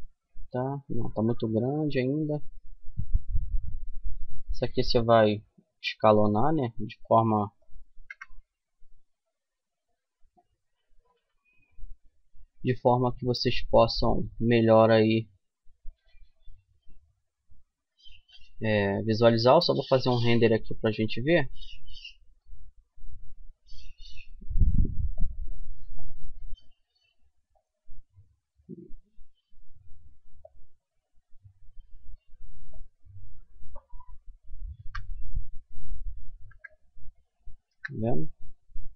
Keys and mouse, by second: 0.5 middle click, 4.5 s, 6.2-7.3 drag, 7.3 KP_0, 10.5 n, 13.5-21.8 drag, 21.8-24.4 middle drag, 24.4-26.1 drag, 25.6 g, 27.7 click, 28.2 g, 31.8 click, 33.5 middle click, 34.0 n, 35.6 KP_0.